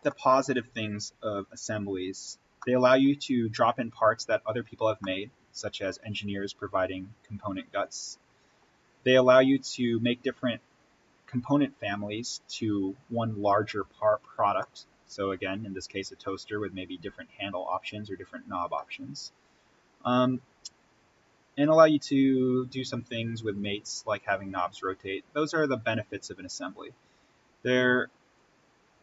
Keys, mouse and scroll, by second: 0.0-1.5 middle drag, 1.5-2.0 scroll up 1, 2.5 middle click, 3.6 scroll down 1, 4.9-10.9 middle drag, 14.5-17.7 middle drag, 18.7-21.8 middle drag, 21.8-22.6 scroll down 1, 23.0-24.7 drag, 24.7-25.2 scroll up 1, 25.5-29.0 drag.